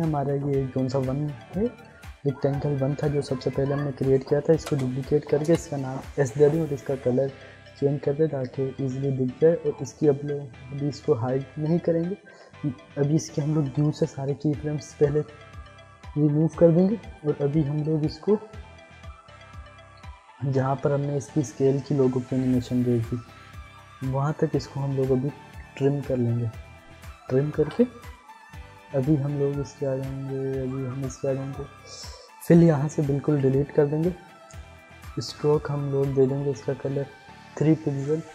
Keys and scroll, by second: 3.0 ctrl+d, 4.6 Return, 5.1 shift+s, 5.4 Return, 13.6 u, 27.7 alt+[, 33.4 Delete.